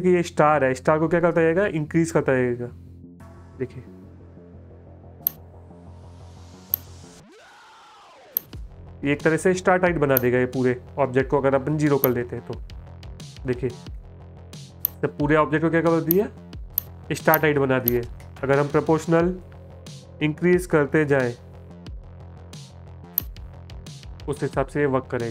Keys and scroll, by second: 14.0 space, 24.8 space.